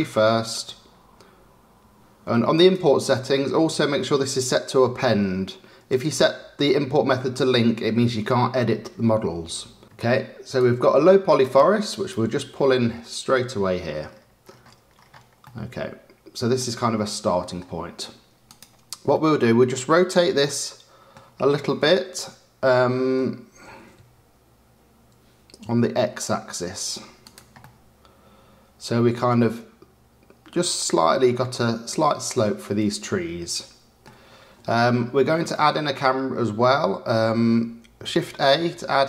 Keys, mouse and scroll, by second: 2.5-5.5 drag, 9.8-11.4 drag, 15.4-16.6 middle drag, 17.0-18.4 middle drag, 18.4 click, 19.0-21.1 middle drag, 21.1-21.6 scroll down 3, 21.6-23.6 middle drag, 23.6 r, 27.5-30.6 middle drag, 35.5-38.2 middle drag, 38.2 shift+a.